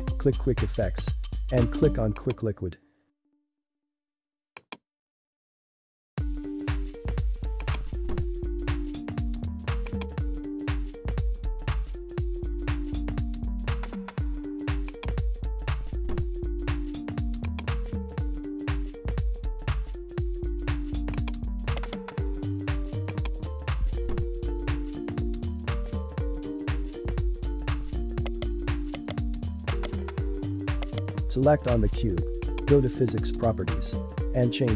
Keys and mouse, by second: 4.6-6.1 drag, 6.1 g, 8.4 s, 9.3 g, 10.2 s, 12.9 g, 15.4 s, 18.7 click, 19.3 g, 21.7 right click, 22.5 click, 28.2 right click, 29.7 right click, 30.8 right click, 32.4 click, 34.3-34.7 drag.